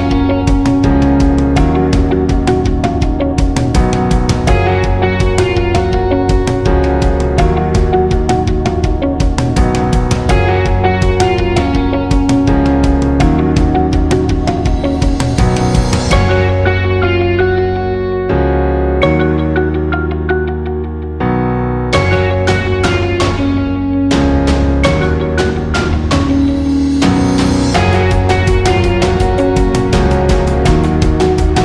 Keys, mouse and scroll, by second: 6.3-8.7 drag, 8.7 scroll down 1, 9.2 scroll down 1, 9.8 scroll up 1, 10.5 scroll up 1, 12.4 click, 18.7 click, 20.1 click, 22.0 scroll down 1, 22.6 scroll up 1, 24.3-28.2 drag, 28.8-31.6 drag.